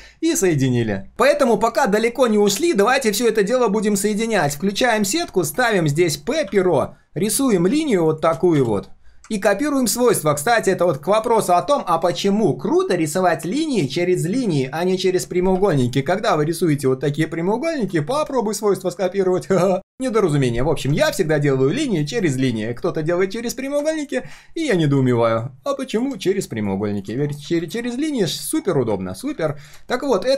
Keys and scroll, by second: 4.1 ctrl+shift+4, 9.9 ctrl+alt+c, 11.1 ctrl+alt+v.